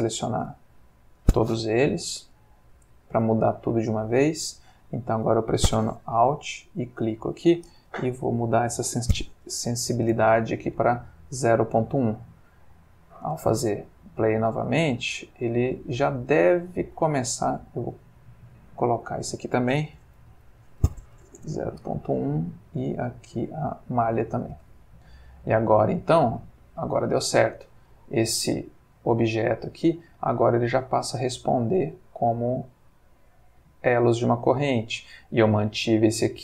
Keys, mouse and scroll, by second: 0.5 ctrl+click, 2.3 shift+click, 2.8 shift+click, 3.3 shift+click, 3.8 shift+click, 6.8 alt+click, 8.1 Right, 8.2 Left, 9.5 BackSpace, 9.5 1, 10.0 Return, 11.3 click, 12.8 click, 13.3 space, 16.2 Escape, 16.7 click, 18.5 click, 19.0 click, 20.0 Right, 20.2 Left, 21.1 BackSpace, 21.2 1, 21.4 Return, 22.6 click, 23.6 click, 24.5 space, 27.7-29.2 middle drag, 33.6-34.8 middle drag.